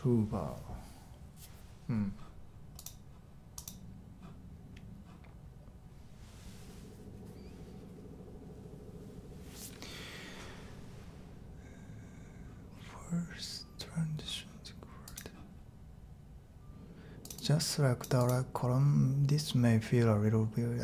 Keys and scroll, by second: 0.0-0.3 typing.